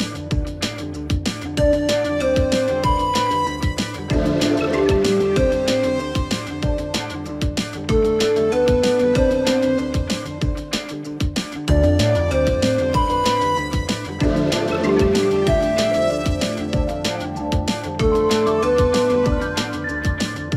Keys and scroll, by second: 5.8 ctrl+alt+g, 7.4 ctrl+t.